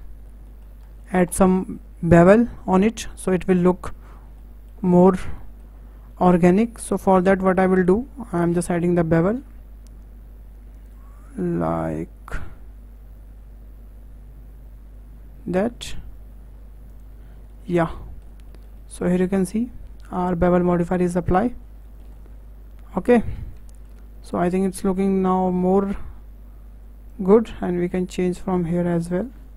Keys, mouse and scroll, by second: 0.5-0.8 shift+middle drag, 0.8-1.3 scroll up 5, 1.3-4.4 shift+middle drag, 4.5-5.0 middle drag, 5.0-5.4 scroll up 2, 5.4-9.4 shift+middle drag, 9.4 q, 17.3 scroll down 2, 17.5-21.6 middle drag, 21.6 scroll down 3, 21.8-23.3 shift+middle drag, 23.3-23.7 scroll up 5, 23.7-27.1 shift+middle drag, 27.1 click.